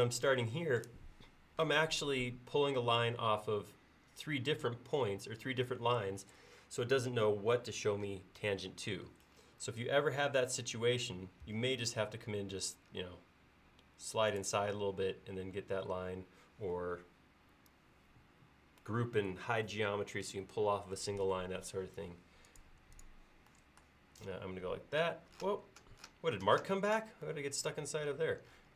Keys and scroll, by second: 11.5 Escape.